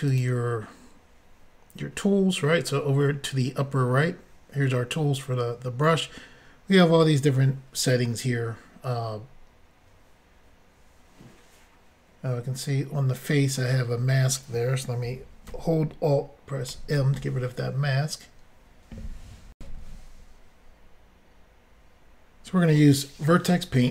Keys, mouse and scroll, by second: 0.1 click, 0.2 click, 16.7 alt+m, 19.5 Insert.